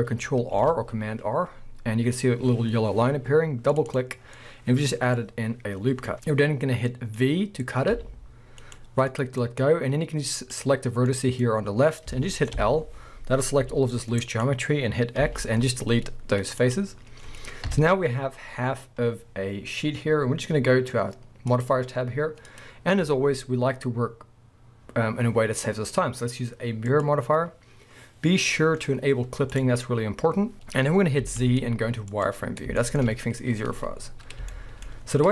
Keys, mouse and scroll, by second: 0.6 ctrl+r, 4.2 scroll down 2, 4.4 middle click, 5.1 scroll up 1, 6.1 middle click, 7.6-7.9 scroll down 1, 7.9 v, 8.7 right click, 9.1 middle click, 9.7-10.4 scroll down 1, 10.4 click, 11.1 middle click, 12.6 l, 13.6 g, 14.4 right click, 14.9-15.2 scroll up 1, 15.2 x, 17.0-17.6 scroll down 2, 17.6 KP_1, 18.3-19.3 scroll up 2, 19.3-21.5 scroll up 1, 21.5 click, 22.5-29.6 drag, 29.6-31.2 middle drag, 30.5-31.0 scroll up 1, 31.2 z, 32.8-34.0 shift+middle drag, 34.0-34.5 scroll up 2, 34.5-35.0 shift+middle drag, 35.0-35.3 scroll up 2.